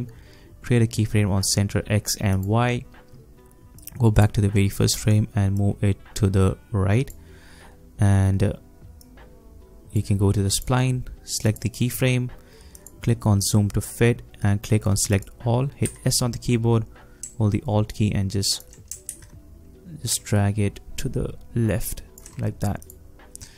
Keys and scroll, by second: 15.9 s, 19.1 ctrl+alt+z.